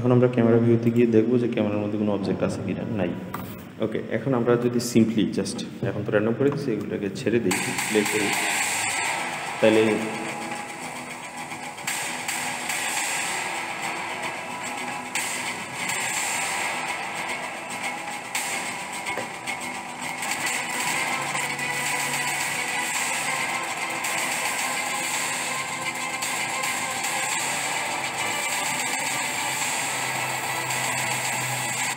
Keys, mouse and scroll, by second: 0.7 click, 1.6-2.3 scroll up 4, 2.3-5.5 scroll down 2, 6.3 space, 19.9-22.9 drag, 31.8 space.